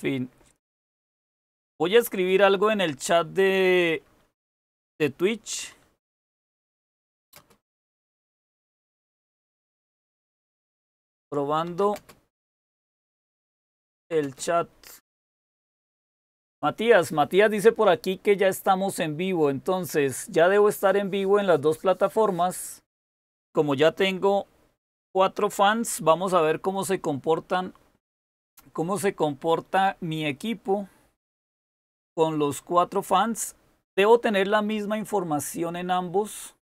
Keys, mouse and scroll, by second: 6.2-8.5 typing, 9.6-14.5 typing.